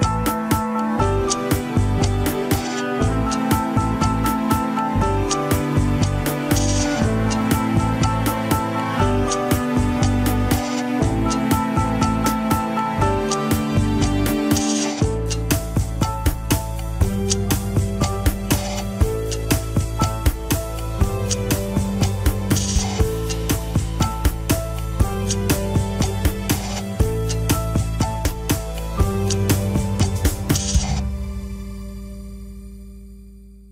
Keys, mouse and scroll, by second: 1.4 scroll down 4, 1.8 Tab, 2.4 ctrl+s, 8.1 scroll up 3, 13.1 click, 13.8 alt+z, 14.3 Tab, 15.0 scroll up 1, 15.2 middle click, 16.0 click, 16.7 KP_1, 17.2 g, 18.6 alt+z, 19.5 alt+z, 19.8 middle click, 20.6 click, 21.1 shift+s, 21.5 alt+z, 21.7 KP_1, 22.1 Tab, 22.3 click, 22.7 Tab, 23.1 r, 31.6 Tab, 32.6 alt+z, 33.0 click, 33.4 click.